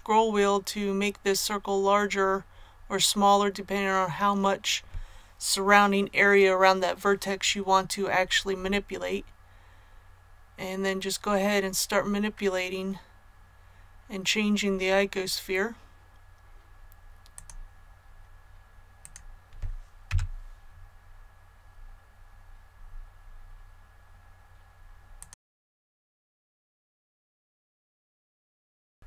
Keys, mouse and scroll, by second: 1.5-2.2 scroll up 1, 2.2 scroll down 1, 3.5-14.6 scroll up 1, 14.6-17.3 scroll down 1, 17.3 click, 19.0-20.0 right drag, 20.0 g, 22.2-22.7 scroll up 1, 22.7-25.1 scroll down 1, 25.1 click, 25.5-26.5 middle drag, 26.7 right click, 27.2 middle click, 27.6 g, 28.0 scroll down 1, 28.2-29.0 scroll up 1.